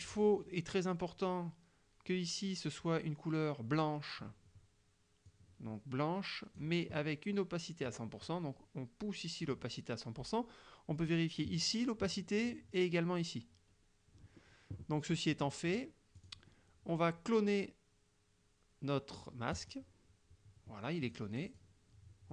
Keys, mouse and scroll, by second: 0.2 click, 5.3-6.8 drag, 7.9-9.7 drag, 15.4 click, 15.7 click, 16.2 click, 19.6 click, 21.1 click, 21.5 click.